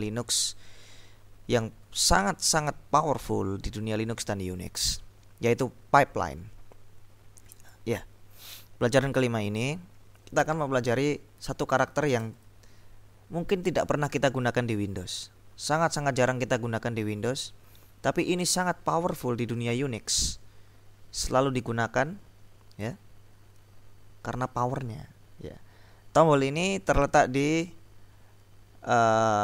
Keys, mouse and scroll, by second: 7.7 click, 12.3 shift+\.